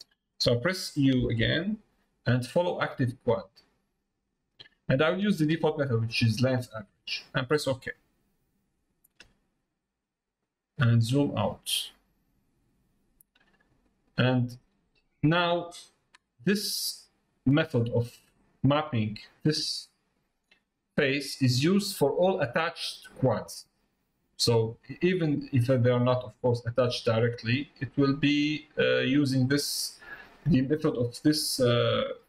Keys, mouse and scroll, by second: 18.3 middle click, 28.6 middle click.